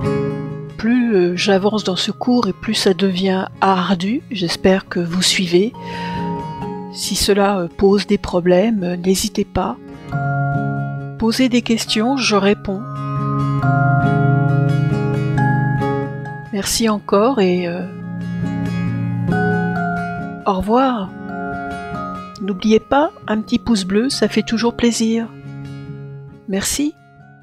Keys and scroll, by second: 1.2 Return.